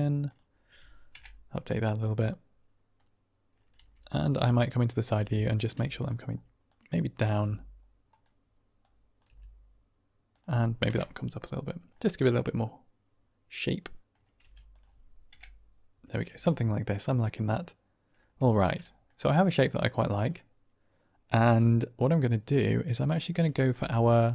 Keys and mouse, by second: 0.2 click, 1.4 Right, 2.0 middle click, 2.5 click, 3.7 KP_1, 4.2 KP_3, 5.0 r, 5.4 click, 5.7 g, 6.0 click, 6.7 click, 7.3 g, 8.0 right click, 8.7 click, 9.2 g, 10.2 click, 11.2 Right, 11.8-14.0 middle drag, 14.3 g, 14.6 click, 15.5 Right, 16.2 Tab, 16.4-18.1 middle drag, 18.4 shift+drag, 18.8 click, 21.0-22.1 middle drag.